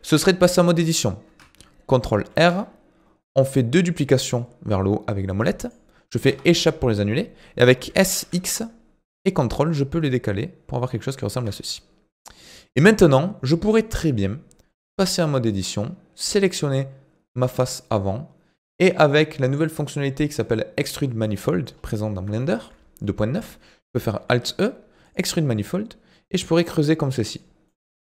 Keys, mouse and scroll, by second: 2.3 ctrl+r, 7.9 s, 11.7 middle click, 12.4-12.9 scroll down 11, 12.9-15.0 middle drag, 15.0 click, 17.7 click, 19.4-21.7 shift+middle drag, 21.7-22.4 scroll up 2, 22.4-24.2 shift+middle drag, 24.2 alt+e, 27.7-28.1 middle drag.